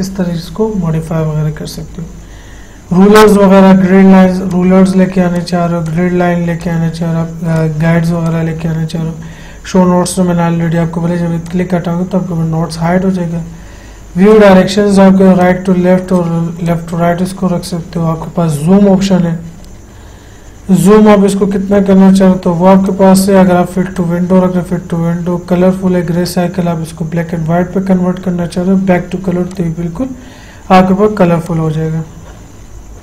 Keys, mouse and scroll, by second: 4.8 click, 11.8 click, 14.6 click, 21.2 click, 23.2 click, 26.5 click, 29.8 click.